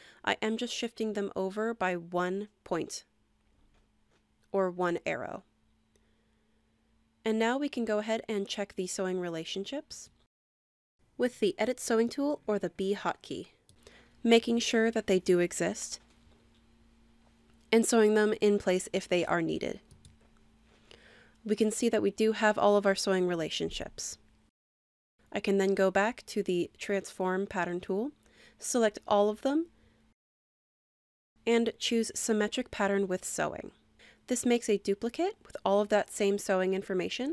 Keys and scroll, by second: 0.1 Right, 4.5 Left.